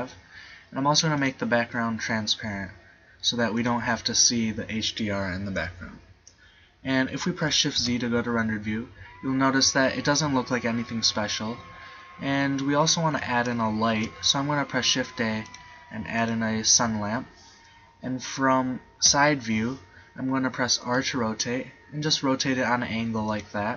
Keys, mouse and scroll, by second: 3.0-5.3 middle drag, 5.7 click, 8.0 shift+z, 13.1 z, 13.9 shift+a, 19.1 KP_3, 21.0 r, 23.5 click.